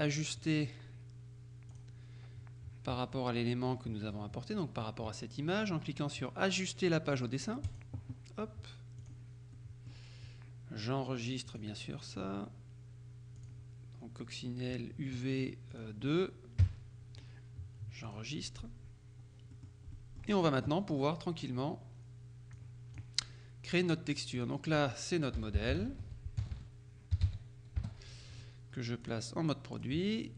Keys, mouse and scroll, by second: 0.5 click, 1.8 click, 7.8 click, 9.1 click, 9.6 right click, 11.6 click, 13.4 click, 15.8 click, 16.7 KP_2, 18.1 click, 19.6 middle click, 22.6 click, 24.4 click, 25.2-27.4 typing, 27.8 Return, 29.1 click, 29.8 click.